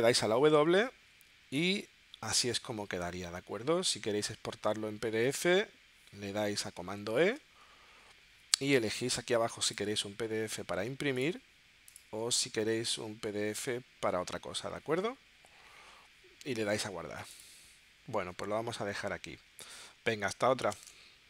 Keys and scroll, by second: 0.1 w.